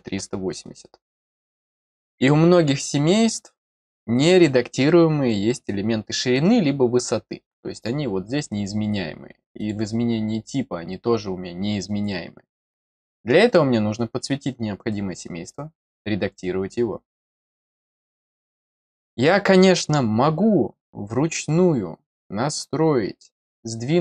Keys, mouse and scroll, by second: 1.0 click, 9.5 click, 12.8 click, 15.8 click, 18.8 scroll down 1.